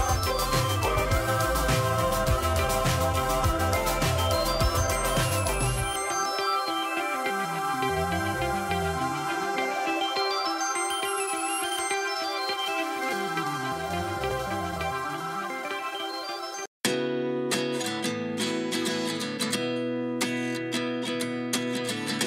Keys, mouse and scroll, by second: 0.2-3.4 drag, 2.7 KP_0, 5.0-5.5 scroll down 3, 5.9-6.2 scroll down 3, 7.4-9.6 drag, 11.3-12.5 drag, 14.3-14.7 drag, 14.7 space, 15.3 space, 19.2-21.3 right drag.